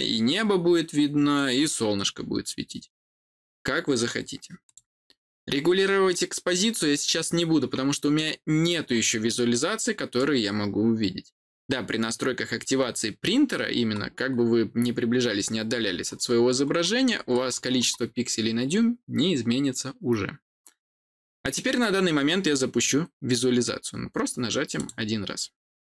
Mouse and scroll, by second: 4.6 click, 8.0 middle click, 8.8 scroll down 1, 9.4-11.6 middle drag, 13.8 middle click, 13.8-15.3 scroll down 6, 14.3-15.6 middle drag, 15.3 scroll up 2, 15.3-15.8 scroll down 2, 15.8 scroll up 2, 15.9 middle click, 16.0 scroll down 2, 17.2 scroll down 1, 17.3 scroll up 1, 17.3 middle click, 17.5 scroll down 2, 17.5 scroll up 1, 17.6 middle click, 17.7-18.4 scroll down 2, 18.4-19.1 scroll up 1, 24.7 click.